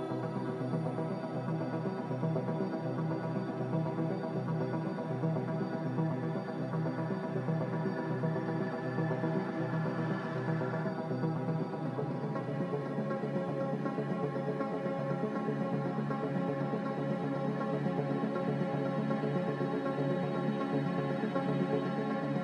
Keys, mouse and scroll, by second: 13.0 Delete, 19.2 click.